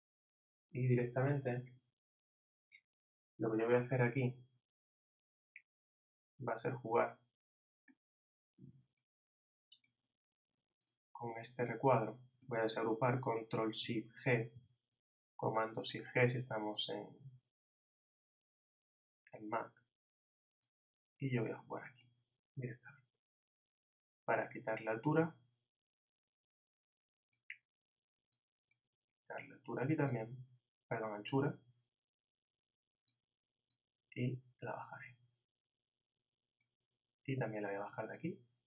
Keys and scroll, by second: 14.5 shift+super+g.